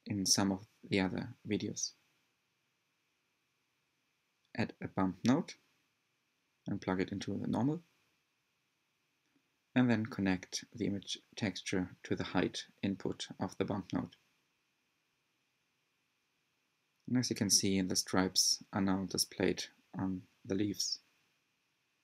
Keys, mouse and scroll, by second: 0.0 click, 2.4 click, 2.9 shift+a, 8.8-11.2 drag, 12.4 click, 16.8-19.3 middle drag, 19.3-21.2 scroll up 1, 21.2-22.0 drag.